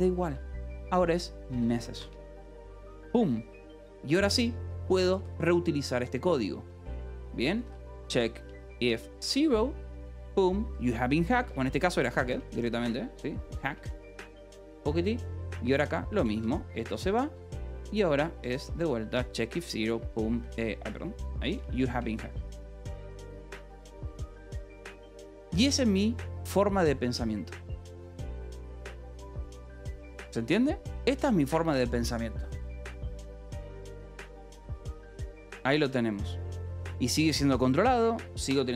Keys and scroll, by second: 0.0-2.2 typing, 2.3 Escape, 3.1 ctrl+s, 3.2 j, 5.4-6.2 typing, 7.5-8.4 typing, 9.6 ctrl+g, 10.5 Escape, 11.2 h, 12.4 a, 12.6 BackSpace, 14.8 Escape, 15.0 j, 16.6 c, 16.9 Escape, 17.5 a, 18.3 c, 18.6 e, 20.0 ctrl+g, 20.4 Escape, 21.4 h, 22.5-24.5 typing, 25.4 ctrl+s, 34.1 k.